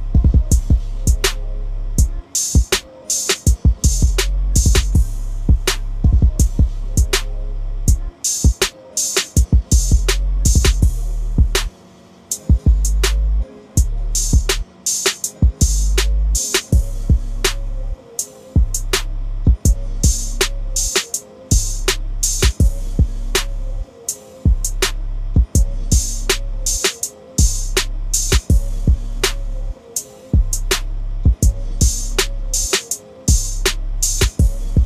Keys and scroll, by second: 23.5 typing, 28.5 typing.